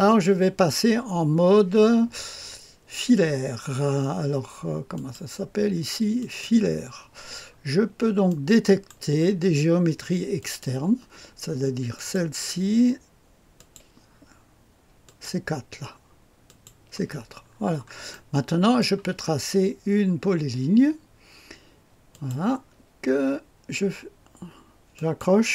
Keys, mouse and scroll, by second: 4.9 click, 6.1 click, 6.9 click, 7.4-8.2 scroll up 1, 8.2 middle click, 8.3 click, 8.9 middle click, 10.3 click, 11.9 click, 13.5 click, 15.0 click, 16.4 click, 17.5-18.1 scroll up 1, 18.1 middle click, 18.7 click, 22.1 click, 24.9 click.